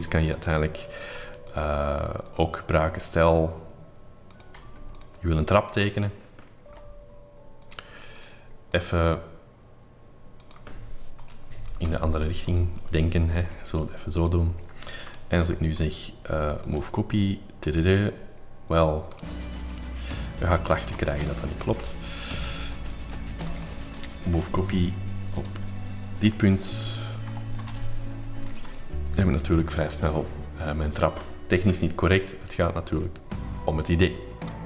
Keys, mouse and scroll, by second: 0.0-1.5 scroll up 2, 1.0 r, 1.5 middle click, 1.6 click, 2.5-3.9 drag, 4.3-6.3 drag, 6.7 p, 7.8-11.3 drag, 11.3-13.9 middle drag, 12.0-12.7 scroll up 4, 13.4 scroll up 1, 14.0 click, 15.2 scroll up 2, 15.5 middle click, 15.5 m, 16.3 scroll up 1, 16.8 ctrl+click, 17.7 click, 18.6 click, 19.2-20.4 middle drag, 20.4 ctrl+z, 20.9 space, 21.5 click, 22.1-24.4 middle drag, 22.7 scroll up 2, 24.4 m, 25.4-26.4 ctrl+drag, 26.5 click, 27.3 5, 27.6 x, 27.7 Return, 28.5 middle click, 28.9 scroll, 29.2-30.9 scroll up 7, 29.3 middle click, 29.5-32.7 middle drag, 33.9 middle click, 34.5 scroll up 1, 34.5 middle click.